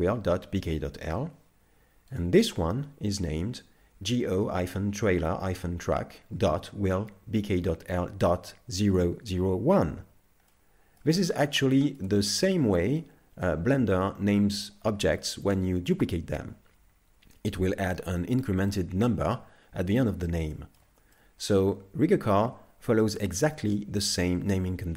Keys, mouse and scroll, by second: 2.2 right click, 10.5 middle click, 11.7 shift+middle click, 12.3 middle click, 13.4 middle click, 13.6 shift+middle click, 15.3 shift+middle click, 20.5 shift+middle click, 21.2 middle click.